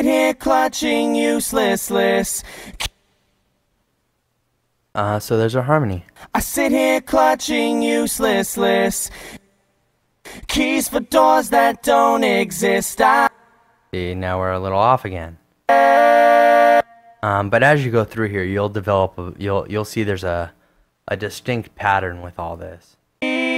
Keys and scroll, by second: 3.1 space, 6.3 space, 9.6 space, 10.5 space, 13.5 space.